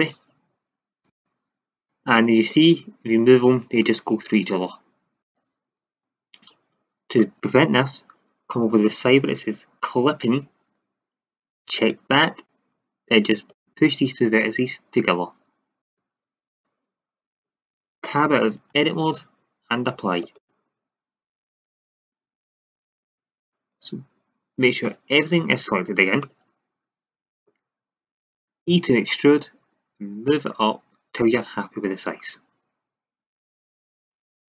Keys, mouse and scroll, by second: 2.4 click, 5.9 ctrl+z, 11.7-15.8 drag, 18.6 Tab, 20.1-21.5 drag, 21.5 middle click, 21.6 middle click, 21.9 Tab, 24.5 a, 24.8 a, 25.5 a, 25.8 a, 26.2-26.6 middle drag, 28.6 e, 33.6-34.4 drag.